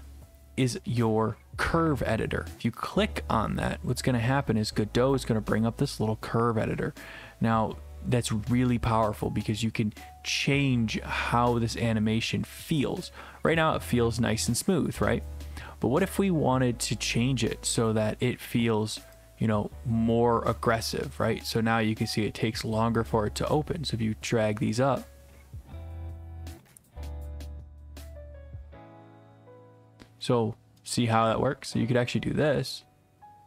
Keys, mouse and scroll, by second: 2.9 click, 5.2 click, 12.8 click, 13.6 click, 22.1 click, 27.3 click, 32.1 click.